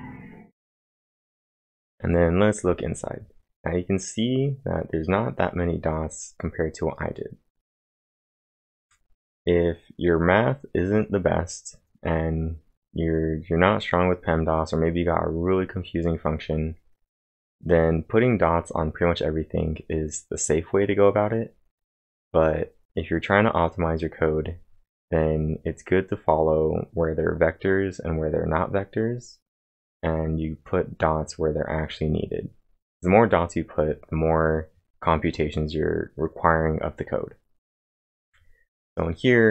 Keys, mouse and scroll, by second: 4.2 click, 4.2 typing, 5.3 click, 5.8 click, 6.9 click, 12.6 click, 13.0 click, 13.6 click, 17.4-18.2 typing, 17.7-25.1 click, 29.8-30.5 typing, 30.0 click, 34.0-34.8 typing, 34.3-36.6 click, 38.0-38.7 typing, 38.2 click.